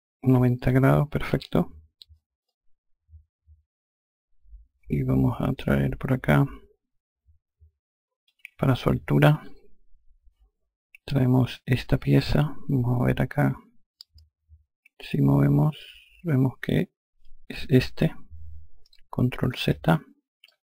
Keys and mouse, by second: 0.8 e, 2.0 click, 8.8 F3, 11.6 click, 15.3 click, 19.1 ctrl+z, 20.0 click.